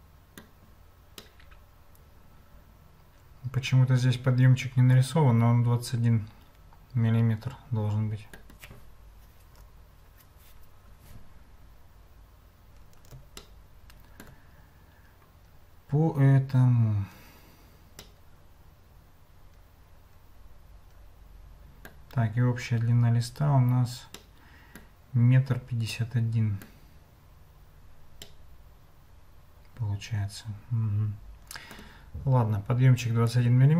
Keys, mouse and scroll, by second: 1.4-8.3 shift+drag, 13.4 shift+click, 18.0-22.0 middle drag, 24.1 middle click, 26.1 middle click, 28.3-31.7 middle drag, 33.0 click.